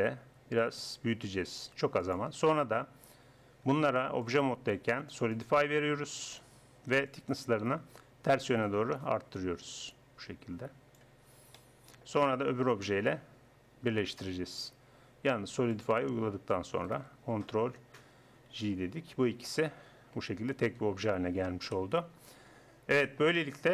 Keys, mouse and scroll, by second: 3.7 Tab, 7.1-11.3 drag, 11.3 middle click, 12.7-15.8 right drag, 16.5 click, 17.4 right click, 17.6 right click, 18.5 ctrl+j, 20.2 g, 21.6 KP_1.